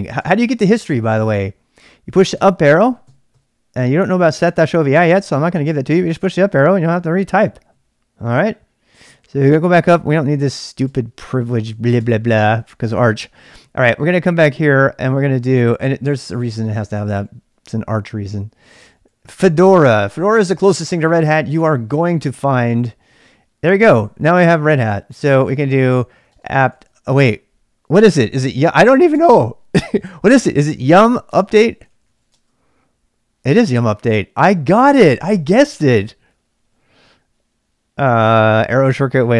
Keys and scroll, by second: 0.2 j, 0.3 j, 2.4 Up, 2.7 Up, 3.2 Up, 3.3 Up, 3.8 Down, 3.9 Down, 4.2 Up, 5.0 Down, 5.4 Up, 5.7 Up, 5.9 Up, 6.1 Down, 6.4 Down, 6.6 Down, 6.9 Up, 7.7 Down, 9.1 Down, 9.4 Up, 9.9 Up, 11.0 Up, 11.7 Up, 12.1 Up, 12.5 Up, 14.6 ctrl+[, 14.8-17.6 typing, 18.7-20.4 typing, 22.1 Return, 25.2-29.1 typing, 31.3-32.6 typing.